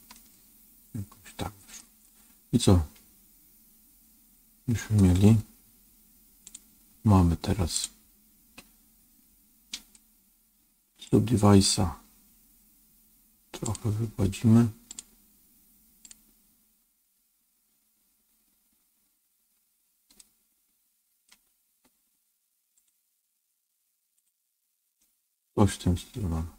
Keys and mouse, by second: 0.0-1.7 middle drag, 6.4 click, 7.6-11.0 drag, 13.6-14.9 drag, 15.9 click, 20.1-21.2 middle drag, 22.7-24.9 drag, 24.9-26.5 middle drag.